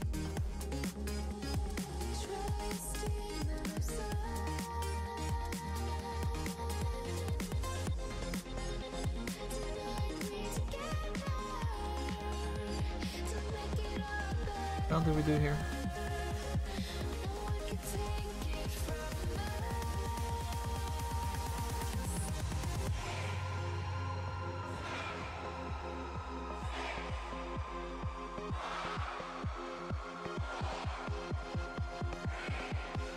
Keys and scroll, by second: 14.3 z.